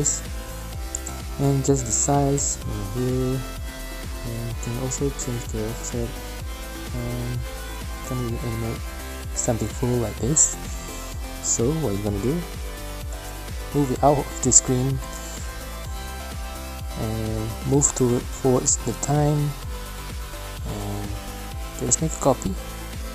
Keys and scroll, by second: 10.8 v, 12.6 alt+shift+p, 18.3 space, 19.1 shift+space, 22.1 ctrl+c, 22.2 ctrl+v.